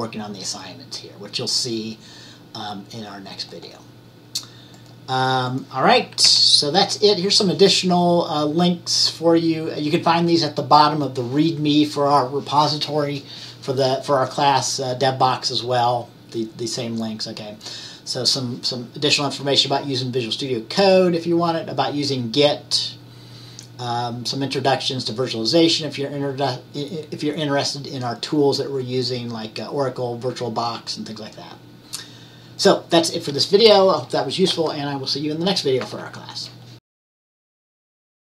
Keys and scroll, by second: 6.3 Right, 38.2 q.